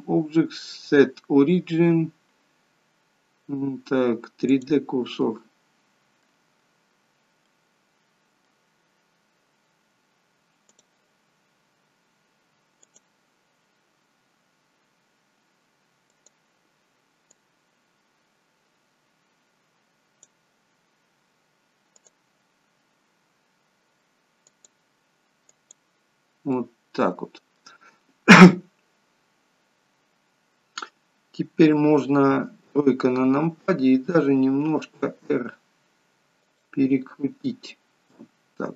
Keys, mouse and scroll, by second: 5.1 middle click, 7.5 middle click, 10.6 click, 12.8 click, 16.0 click, 17.4 click, 21.8 click, 26.5 middle click, 32.5 KP_3, 34.1 r, 38.0 click.